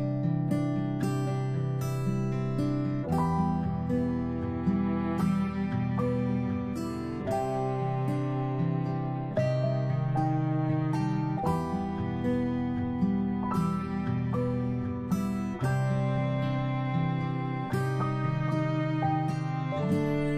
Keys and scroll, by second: 14.0 ctrl+space, 15.9 ctrl+z, 16.8 a.